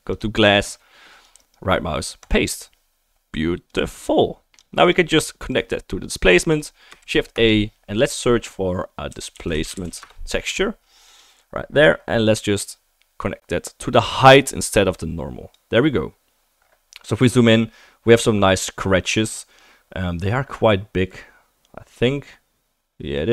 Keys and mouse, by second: 1.2 click, 1.3-3.7 right drag, 3.7-6.9 drag, 7.0 shift+a, 11.3-16.6 drag, 15.0-16.6 right drag, 16.9 click, 16.9 right click, 21.0-22.4 middle drag.